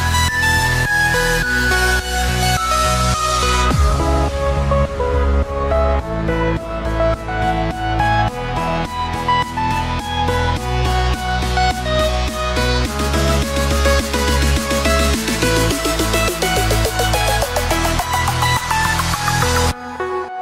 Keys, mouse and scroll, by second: 2.1-4.9 drag, 5.2-5.5 scroll down 3, 5.5-9.1 middle drag, 9.2 KP_7, 9.8-11.5 scroll down 10, 11.5-15.2 drag, 15.7-17.1 scroll up 3, 17.1-20.4 drag.